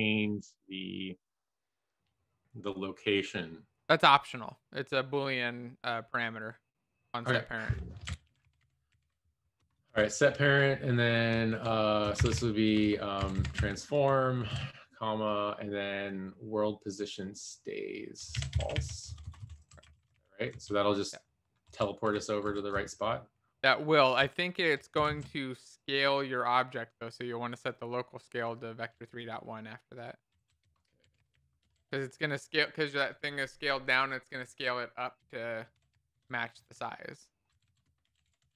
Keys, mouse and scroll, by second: 9.3-10.5 typing, 11.6-14.5 typing, 18.2-20.4 typing, 19.6 Right, 20.5 ctrl+s, 20.5 Down, 22.0 Up, 22.0 Home, 22.4 Up, 22.7 Right, 23.2 Right, 23.8 Right, 23.9 Right, 25.3 ctrl+., 28.6 Return, 29.0 Down, 29.4 ctrl+s, 29.4 End, 29.9 Up, 30.4 Down, 32.1 Return, 34.0 a, 34.4 Return, 35.2-37.3 typing, 37.5 Down, 37.6 Down.